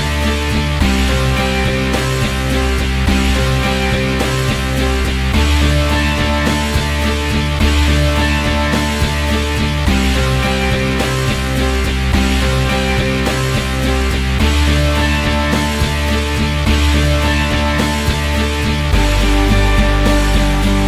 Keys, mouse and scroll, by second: 2.3-4.3 drag, 5.5 middle click, 6.3 click, 6.4-6.9 scroll down 20, 6.9-9.3 drag, 10.4-11.6 drag, 11.6 middle click, 11.7 ctrl+alt+s, 12.4-13.4 drag, 13.6-14.6 drag, 15.2 click, 15.6 middle click, 15.7 shift+a, 16.4 middle click, 16.5 ctrl+alt+s, 16.7 scroll down 1, 16.9-18.7 typing, 16.9 scroll up 1, 17.8 alt+middle click, 18.3 alt+middle click, 19.3-20.8 drag.